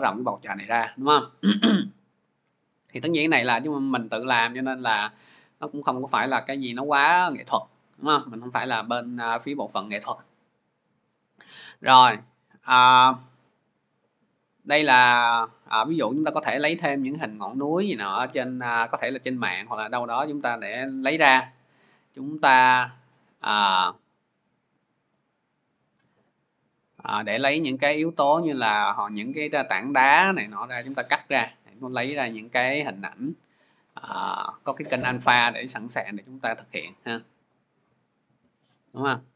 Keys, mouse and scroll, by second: 5.6 click, 6.2 click, 11.5 click, 11.7 click, 12.7-13.6 scroll, 22.0 click, 22.5-25.4 click, 25.6 click, 26.2-26.7 scroll, 31.9 click, 32.1 click, 32.8-33.4 scroll, 34.1 click, 34.9 click, 37.9 click, 38.1 click.